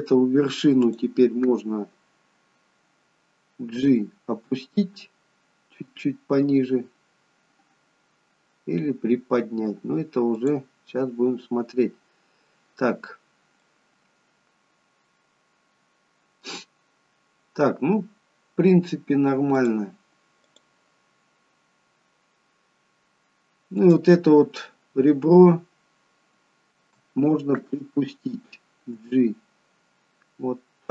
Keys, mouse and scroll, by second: 1.0 click, 3.7 g, 13.7 middle click, 16.9-17.5 scroll down 1, 19.7 click, 20.6 click, 21.2-22.3 scroll down 1, 23.9 click, 29.1 g.